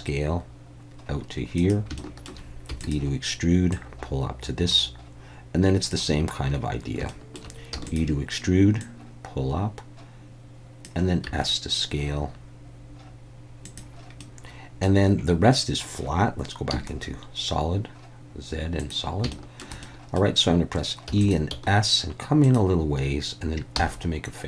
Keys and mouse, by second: 1.5 click, 2.0 shift+middle click, 2.7 e, 2.8-5.9 drag, 7.1 shift+middle click, 7.7 e, 8.8-10.8 drag, 11.3 s, 13.6 click, 14.3 middle click, 16.7 z, 19.3 shift+middle click, 19.8 middle click, 21.1 e, 21.2 click, 21.5 s, 22.4 click, 23.7 f.